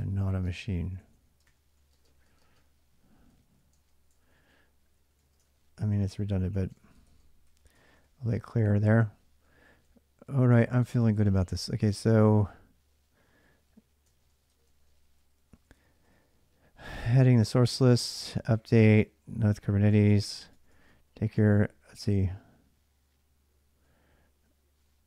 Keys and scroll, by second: 0.0-21.5 typing, 13.9 ctrl+[, 19.8 ctrl+[, 23.3-25.0 typing.